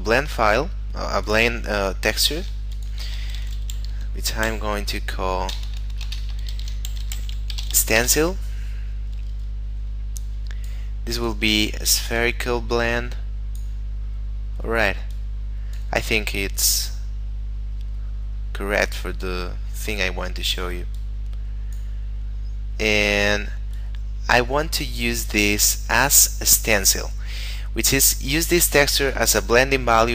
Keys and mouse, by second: 3.4 shift+s, 3.7 t, 3.9 e, 4.4 n, 5.5 BackSpace, 6.5-7.5 typing, 8.0 Return, 10.2 click, 15.1 click, 21.0 click, 23.7 click.